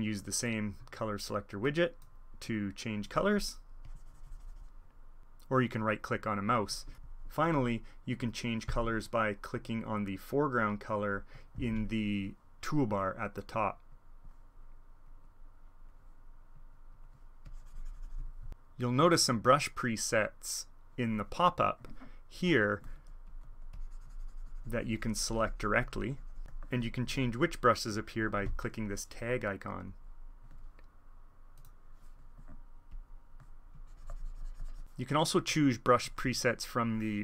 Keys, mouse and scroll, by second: 0.4-1.7 drag, 2.5 click, 3.8-5.0 drag, 8.6 alt+e, 9.6-11.3 drag, 11.3 alt+e, 13.7-17.1 drag, 17.4-18.5 drag, 19.1 click, 21.2-23.2 middle drag, 23.2-26.6 drag, 26.4 alt+e, 27.4 click, 28.2 alt+e, 29.8-31.3 drag, 31.5 click, 32.8-34.8 drag.